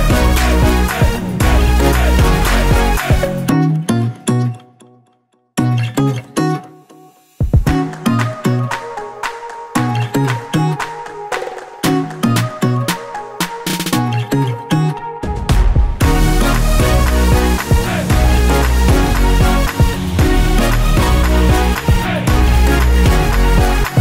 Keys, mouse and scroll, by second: 0.2 click, 0.6 g, 2.1 Escape, 2.2 ctrl+z, 3.0 shift+z, 3.3 click, 4.7 g, 6.7 click, 6.9-8.3 middle drag, 7.7 ctrl+z, 8.3 click, 8.5 scroll down 1, 8.8 Tab, 9.5 shift+z, 9.9-19.1 middle drag, 10.9 scroll down 2, 14.6 scroll down 1, 15.7 scroll up 1, 16.5 scroll up 1, 17.0 scroll down 1, 18.5-19.1 scroll up 1, 19.1 click, 19.9 s, 20.7 s, 20.7 click, 21.2-24.0 middle drag, 23.0 KP_4, 23.3 KP_1, 23.7-24.0 scroll up 2.